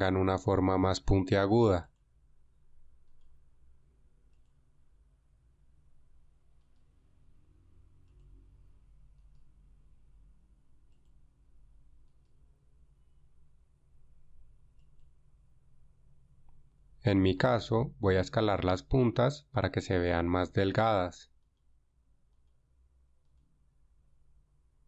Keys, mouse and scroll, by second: 3.6 g, 7.2 g, 9.8 g, 9.9 g, 12.8 g, 12.9 g, 24.0 s.